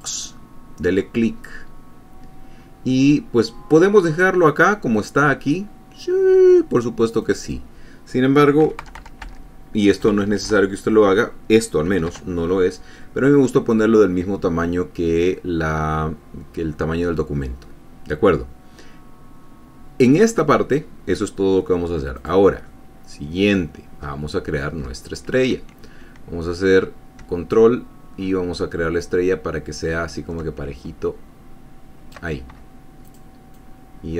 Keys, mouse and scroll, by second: 0.2 click, 2.5-3.1 scroll down 2, 7.5 click, 8.9 KP_3, 9.1 KP_0, 9.5 Tab, 10.3 KP_3, 10.4 KP_0, 12.4 shift+Tab, 22.5 click, 23.0 click, 24.3 scroll up 1, 25.1-25.4 ctrl+scroll down 1, 25.4 ctrl+scroll up 1, 27.8-32.6 ctrl+drag, 33.4 click, 33.9-34.1 drag.